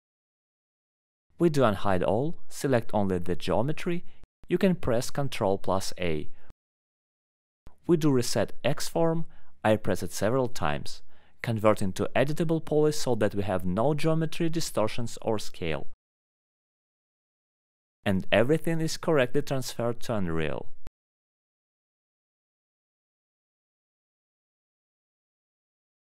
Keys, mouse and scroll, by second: 1.1 alt+middle click, 1.3 middle click, 1.6 right click, 2.9 click, 3.1 middle click, 3.9 alt+middle click, 3.9-4.3 scroll, 5.2 click, 7.5 click, 8.9 alt+middle click, 9.5 alt+middle click, 10.3 click, 11.4 click, 12.3 click, 13.2 click, 13.5 click, 14.1 right click, 15.4 click, 16.3 middle click, 16.6-17.0 scroll, 17.6 middle click, 17.8-18.1 alt+scroll, 18.1 alt+middle click, 21.5 alt+middle click, 22.8 scroll, 22.9 middle click.